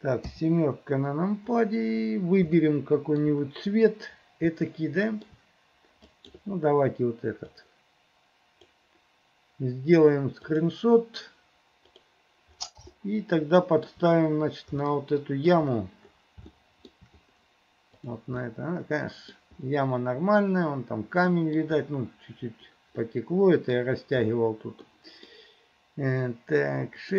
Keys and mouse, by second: 0.3 KP_7, 2.7 shift+middle click, 4.8 shift+middle click, 13.0 shift+middle click, 14.9 shift+middle click, 16.6 shift+middle click, 18.5 middle click, 21.5 middle click, 23.2 middle click, 25.0 middle click.